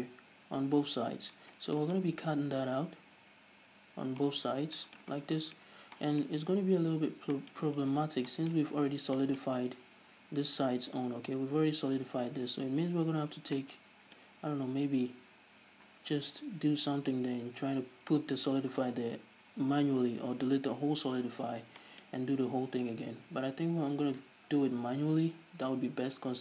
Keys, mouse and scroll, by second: 8.8-26.4 middle drag, 9.4 scroll down 2.